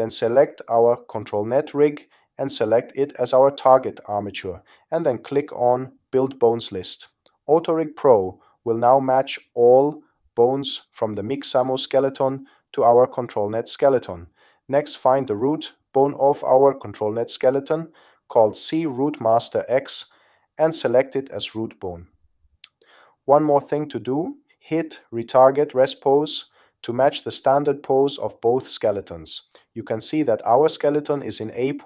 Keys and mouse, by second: 0.8 click, 4.8 click, 6.9-16.8 drag, 17.4 click, 21.9 click, 23.1 click, 26.1-27.3 drag.